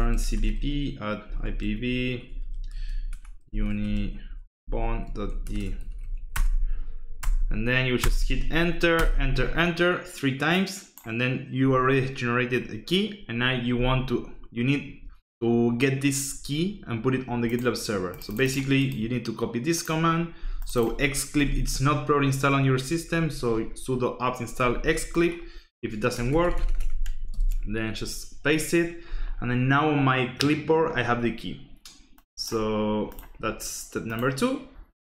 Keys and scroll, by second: 0.0-6.5 typing, 7.2 Return, 8.0 Return, 8.9 Return, 21.3 alt+Tab, 26.1 BackSpace, 26.3 BackSpace, 26.8 BackSpace, 27.3 ctrl+shift+v.